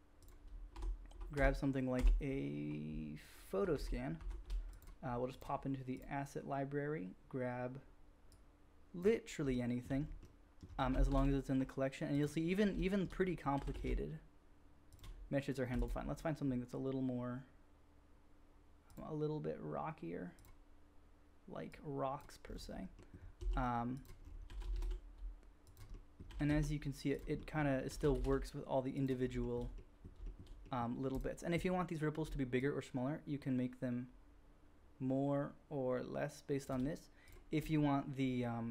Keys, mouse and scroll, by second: 0.4-1.9 shift+drag, 0.4-1.9 shift+right drag, 0.7 shift+F3, 1.3 shift+F3, 1.9 shift+F3, 3.7 shift+F1, 4.1 shift+F1, 4.9-5.3 drag, 7.9-9.1 middle drag, 9.1-10.5 shift+drag, 10.7 g, 10.9 shift+click, 12.2 click, 12.6-13.0 shift+middle drag, 13.0-13.9 drag, 13.6 g, 13.9-14.9 shift+middle drag, 15.7 x, 18.8 click, 18.8 middle click, 18.8 right click, 20.3 click, 21.7-22.1 drag, 22.2-24.3 drag, 23.3 s, 24.5 g, 24.7 shift+click, 26.3 g, 27.1-27.5 shift+drag, 27.8 g, 28.0 shift+click, 29.2 shift+click, 29.4 shift+middle drag, 30.1 shift+middle drag, 30.5-32.5 drag, 32.5-37.3 shift+middle drag, 37.3 drag, 37.5-38.7 middle drag.